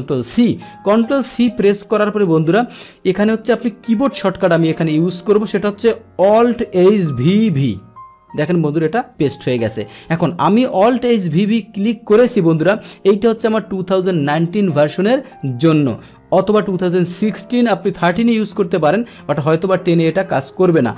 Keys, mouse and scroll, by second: 0.4 ctrl+c, 1.4 click.